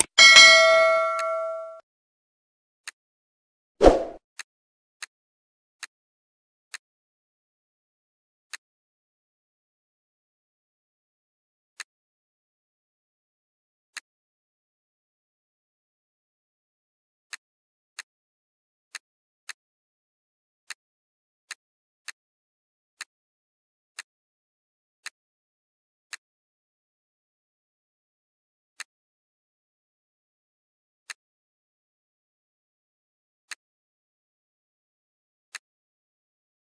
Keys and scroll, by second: 15.4 ctrl+z.